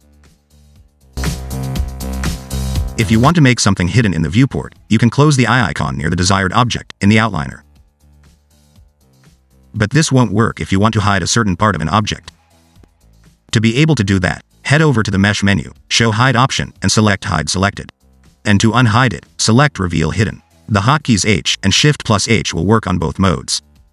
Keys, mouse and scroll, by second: 0.0 click, 0.1 click, 0.2 click, 0.4 click, 5.5 click, 8.9 click, 10.7 Tab, 11.8 click, 15.1 click, 17.7 scroll down 1, 17.8 middle click, 19.7 click, 21.9 middle click.